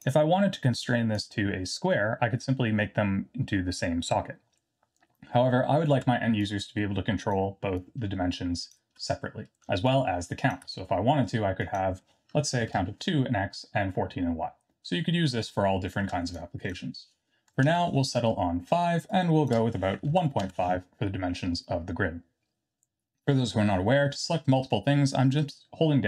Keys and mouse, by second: 1.2-1.9 drag, 6.5 shift+click, 7.8 shift+click, 9.8 shift+click, 11.7-13.8 drag, 16.4-21.0 shift+drag.